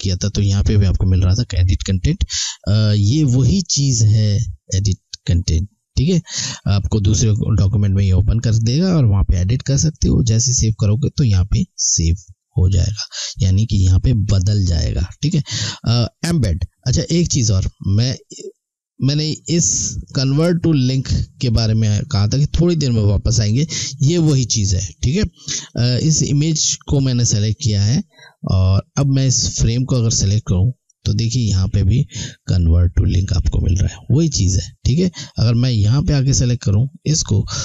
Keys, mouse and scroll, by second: 3.1 click, 18.4 click, 26.0 click, 30.0 click, 34.4 click.